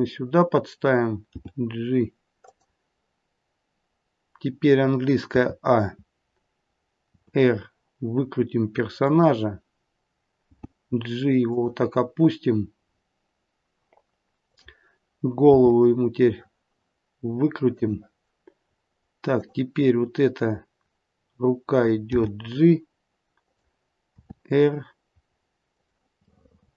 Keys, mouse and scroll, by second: 1.3 g, 5.3 a, 7.1 r, 10.4 g, 12.8-13.4 scroll up 1, 13.4-14.4 scroll up 1, 14.4 click, 15.7 r, 19.3 click, 20.5-22.1 scroll down 2, 22.1 g, 24.1 r, 26.2 middle click.